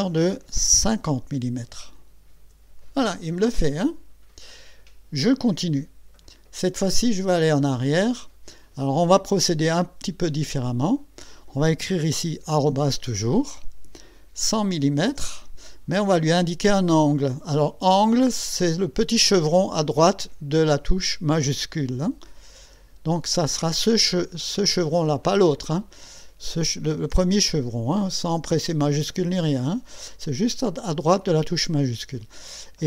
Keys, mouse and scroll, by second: 0.9 KP_5, 1.6 KP_0, 2.4 KP_Enter, 14.4 KP_1, 14.8 KP_0, 22.6 <.